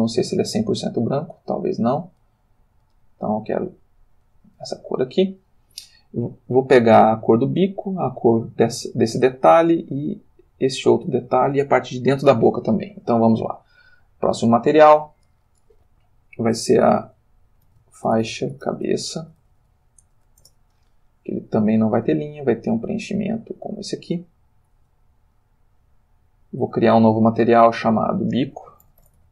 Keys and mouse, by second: 0.1 click, 1.9 click, 13.7 click, 15.1 click, 17.7-20.2 typing, 20.4 Return, 21.9 click, 22.5 click, 23.0 click, 23.8 click, 24.7 click, 26.6 click, 27.0 middle click, 27.5 click, 28.0 click, 28.8 shift+b, 29.0 shift+i, 29.2 shift+o.